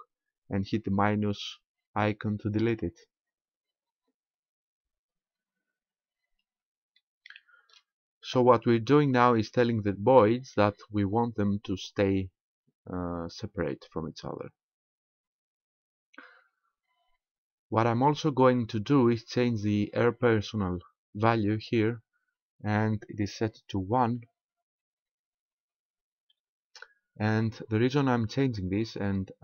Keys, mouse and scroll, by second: 2.5 click, 7.0 shift+middle click, 16.2-16.8 scroll up 1, 16.8-17.9 scroll up 4, 17.9-18.5 scroll up 1, 18.5-20.1 scroll up 3, 24.0 alt+a, 26.7 Escape.